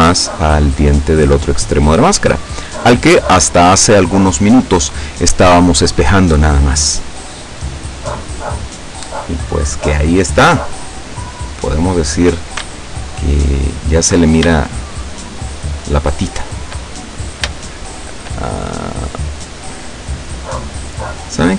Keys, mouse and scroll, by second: 0.4-1.4 drag, 1.8 right click, 2.8-3.8 drag, 7.5-12.4 middle drag, 13.4 alt+shift+right click, 14.6 shift+right click, 15.6 shift+right click, 16.9-17.3 shift+scroll up 1, 17.3 scroll down 1, 17.4 scroll up 1, 17.6 shift+right click, 18.8 scroll up 1, 21.0 scroll down 2.